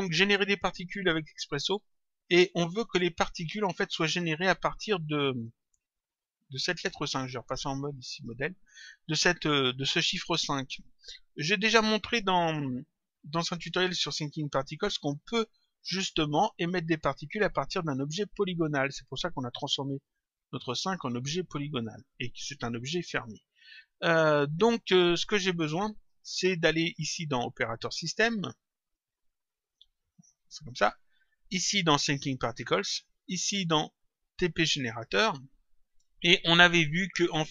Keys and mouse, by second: 3.9 click, 7.7 click, 23.9 click, 28.7 click, 32.5 click, 34.7 click.